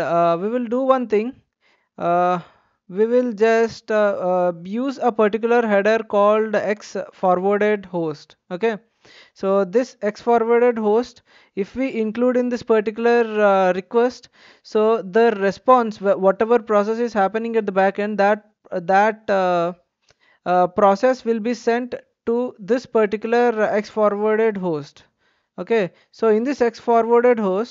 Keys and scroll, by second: 9.9 Return, 11.1-12.2 typing, 27.0-27.7 typing.